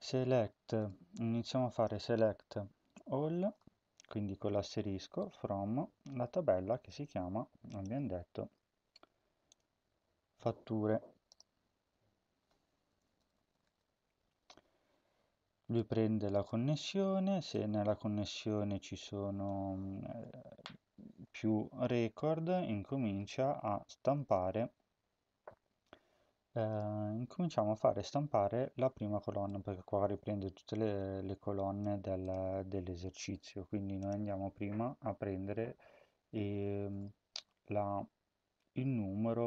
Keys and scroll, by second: 12.7-14.2 typing.